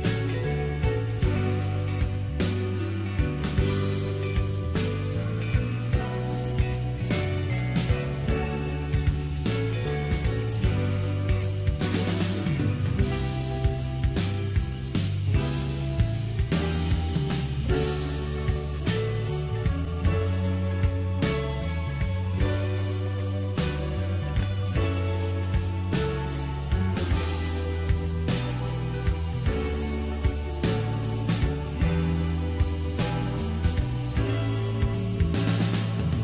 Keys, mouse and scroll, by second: 0.8 g, 5.3 g, 10.5 s, 14.6-19.0 shift+middle drag, 25.5-35.3 drag, 35.3-36.2 scroll down 2.